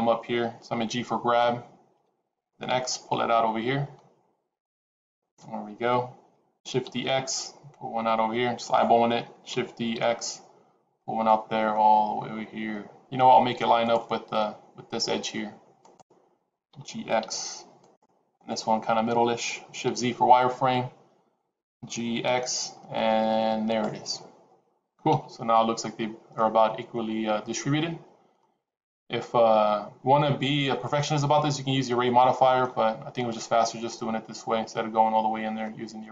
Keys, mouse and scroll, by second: 1.9 g, 6.8 shift+d, 9.7 shift+d, 15.7 click, 16.7 g, 18.3 click, 20.1 shift+z, 21.6 g, 25.3 shift+z, 26.3 middle click, 31.7 middle click, 33.1 click, 33.8 middle click.